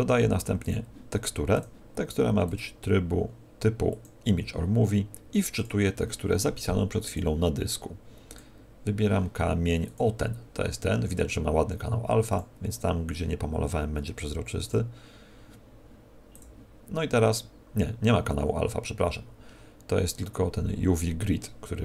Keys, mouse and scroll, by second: 5.5 click, 12.4 click, 17.1 scroll down 1, 18.0 scroll down 4.